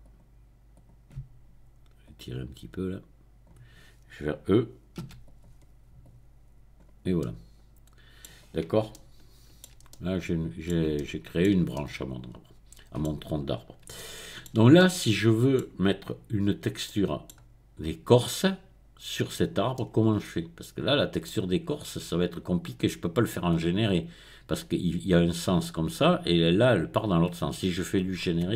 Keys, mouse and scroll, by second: 0.0 click, 0.7 click, 2.0-3.6 drag, 5.1 e, 5.2 click, 6.0-7.0 drag, 8.4 middle click, 9.7-10.7 shift+middle drag, 10.9 shift+middle click, 13.3-13.8 scroll down 2, 13.8 scroll down 1, 19.7-22.1 middle drag, 22.1-22.6 scroll up 1, 22.6-23.5 scroll down 1, 23.5 scroll down 1.